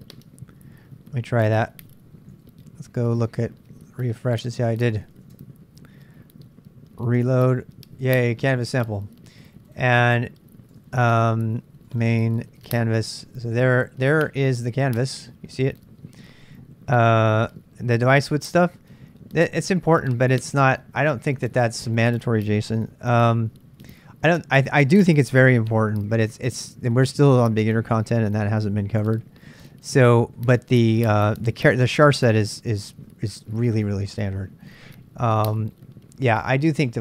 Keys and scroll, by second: 1.4 super+Tab, 2.8 super+Tab, 3.2 super+Tab, 3.4 super+Tab, 4.3 super+Tab, 4.8 super+Tab, 5.0 super+Tab, 5.1 super+Tab, 5.3 super+Tab, 7.1 ctrl+r.